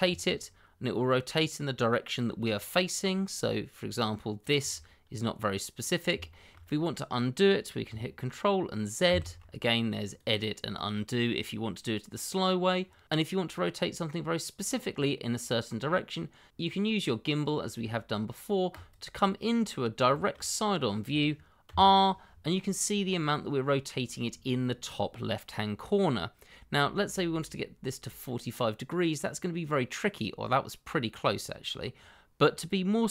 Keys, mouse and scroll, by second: 0.0 r, 4.4 click, 4.8 middle click, 6.4 shift+middle click, 6.6-7.8 shift+scroll up 2, 9.0 ctrl+z, 10.0 click, 18.7 click, 19.6-20.0 scroll up 1, 20.1 shift+middle click, 20.2 middle click, 20.3 shift+middle click, 21.6 r.